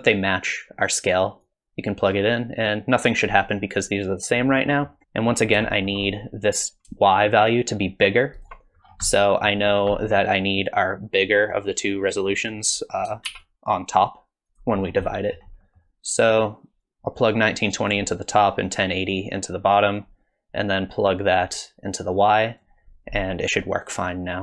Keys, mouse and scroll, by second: 1.4 click, 2.6 click, 4.7 middle click, 5.0 shift+middle click, 5.6-6.5 scroll up 2, 5.7 shift+middle click, 7.1 shift+click, 8.8-9.7 scroll down 4, 9.1 middle click, 9.7-10.1 scroll down 2, 10.0 middle click, 12.4 click, 13.3 shift+d, 14.8-15.4 scroll up 5, 15.1 middle click, 15.6 middle click, 16.8 click, 18.8 click, 21.1 click.